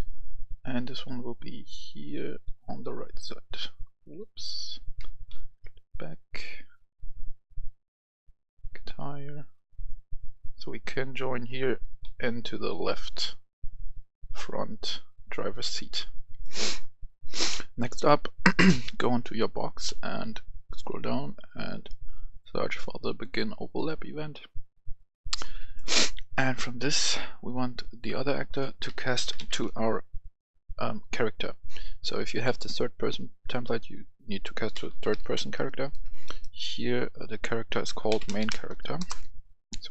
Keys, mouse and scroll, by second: 4.1 Escape, 5.2 ctrl+z, 6.1-10.3 drag, 11.5 right click, 11.6-13.4 typing, 14.3 click, 15.4 right click, 15.5 d, 17.1 click, 17.4 F10, 18.8 click, 19.7 scroll down 1, 22.3-23.3 drag, 25.3-26.3 right drag, 27.7 click, 28.8-29.3 typing, 30.3 typing, 34.4-35.5 typing, 37.8-38.4 typing, 38.9 Return, 39.8-39.9 drag.